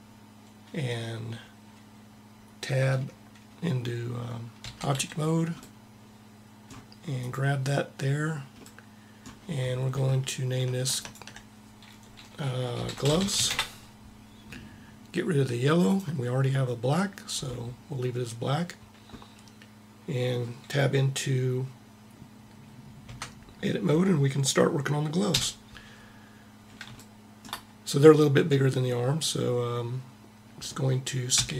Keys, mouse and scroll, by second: 4.3 Tab, 5.4 middle click, 7.0 right click, 15.6-17.2 drag, 22.8 Tab, 25.0 KP_1, 31.0 s.